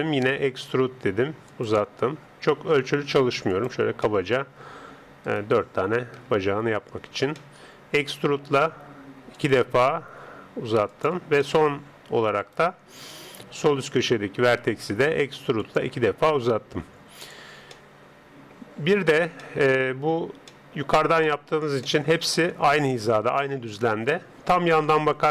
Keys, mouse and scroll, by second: 0.3 e, 2.1 e, 4.0-5.9 middle drag, 5.3 click, 5.9 right click, 6.2 KP_7, 7.4-9.4 middle drag, 8.3 e, 11.5 middle click, 11.5 e, 12.4 click, 13.2 right click, 13.5 KP_7, 14.5 e, 16.1 e, 17.8-24.7 middle drag, 24.7 KP_3.